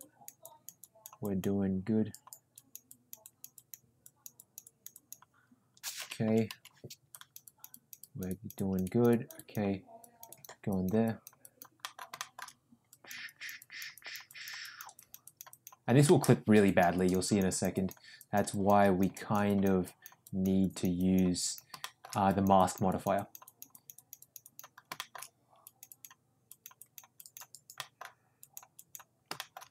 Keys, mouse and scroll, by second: 0.0 click, 0.4 click, 0.8 click, 1.2 click, 2.5 click, 2.8 click, 3.2 click, 3.5 click, 4.0 click, 4.3 click, 4.6 click, 4.9 click, 6.2 [, 6.4 [, 7.1 click, 7.4 click, 7.7 click, 8.0 click, 9.3 click, 10.0 click, 10.3 click, 10.7 click, 11.0 click, 11.4 click, 11.8 middle click, 12.1 shift+middle click, 12.9 click, 13.2 click, 13.6 click, 13.9 click, 14.2 click, 14.6 click, 14.9 click, 15.2 click, 15.5 click, 16.0 middle click, 16.6 click, 16.9 click, 17.2 click, 17.5 click, 17.7 click, 18.2 click, 18.5 click, 18.8 click, 19.1 click, 19.4 click, 19.8 click, 20.2 click, 20.6 click, 20.9 click, 21.4 click, 21.8 shift+middle click, 22.3 click, 22.5 click, 22.9 click, 23.1 click, 23.4 click, 23.7 click, 24.2 click, 24.4 click, 24.9 shift+middle click, 25.6 click, 25.8 click, 26.4 click, 26.8 click, 27.1 click, 27.7 middle click, 28.3 click, 28.7 click, 29.3 shift+middle click.